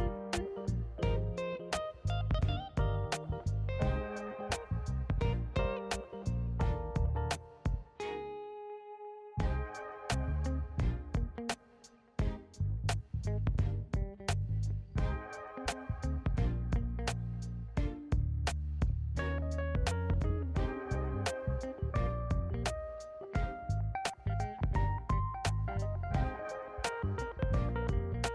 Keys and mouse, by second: 1.0 click, 1.6 shift+click, 2.4 x, 4.2 click, 5.1 shift+click, 7.5 alt+d, 7.8 g, 7.9 middle click, 10.4 alt+r, 12.6 s, 13.9 click, 14.3 g, 16.2 s, 17.3 middle click, 20.3 g, 21.0 x, 22.6 click, 24.0 click, 26.1-26.7 middle drag, 27.6 shift+a.